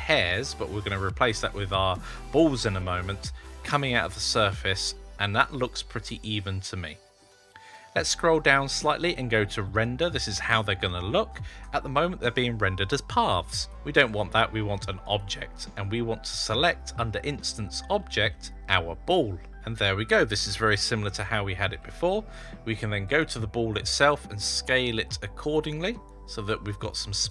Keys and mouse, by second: 4.0-7.0 middle drag, 9.6 click, 13.4-15.0 drag, 18.5-19.6 drag, 23.0 click, 24.0 s.